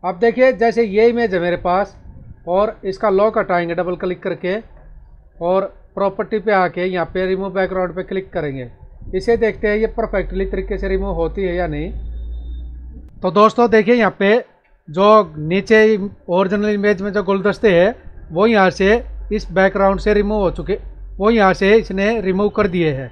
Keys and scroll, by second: 1.4 ctrl+=, 13.6 space.